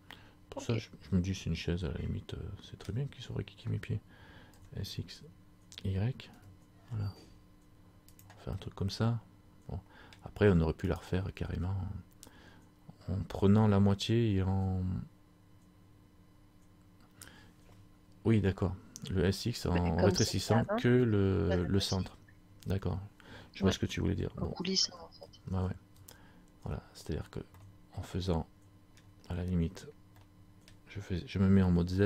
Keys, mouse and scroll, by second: 3.1 scroll down 1, 4.5 s, 8.6 scroll up 1, 8.7 middle click, 11.1 right click, 24.9-26.0 ctrl+z, 27.2-27.6 scroll down 3, 27.7 middle click, 30.4 middle click, 30.4 scroll up 1.